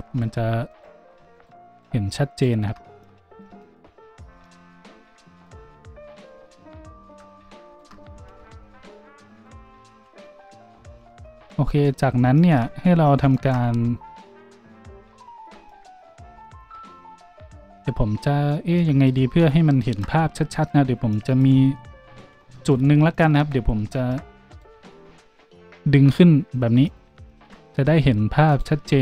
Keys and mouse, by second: 0.0 z, 0.7 alt+shift+middle click, 1.3 middle click, 1.7 middle click, 2.3 middle click, 3.4-7.6 shift+drag, 7.6 alt+shift+middle click, 7.7-9.3 alt+shift+drag, 9.3 alt+shift+middle click, 9.4 alt+shift+click, 9.9 z, 13.7 z, 16.7-23.8 drag, 22.0 z, 24.5 click, 24.5 middle click, 24.5 right click, 27.0 g, 28.5-29.0 middle drag.